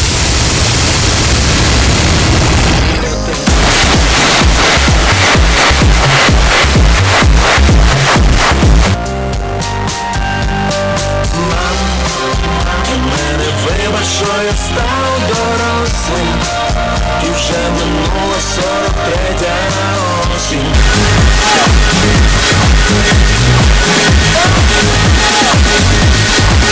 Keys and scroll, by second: 8.8 Page_Down.